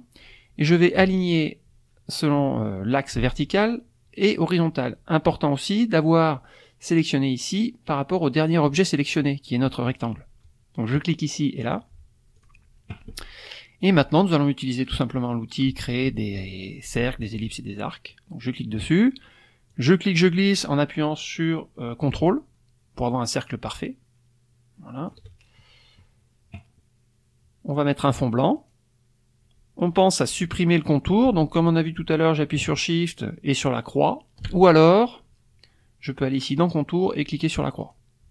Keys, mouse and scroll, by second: 7.5 click, 8.6 click, 10.9 click, 11.6 click, 12.3 click, 18.1 click, 19.7-25.3 drag, 28.6 click, 36.5 click, 37.8 click.